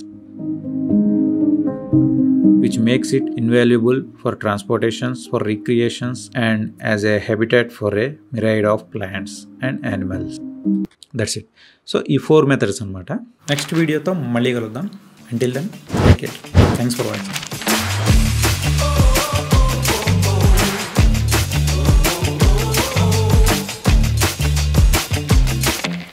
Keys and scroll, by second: 10.6 space.